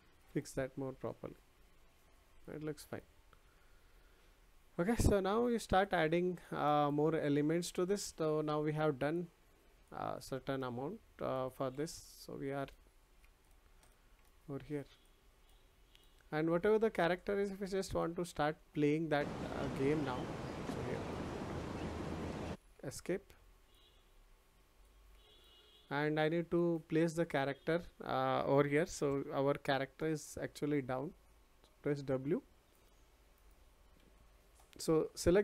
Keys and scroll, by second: 22.4 Escape.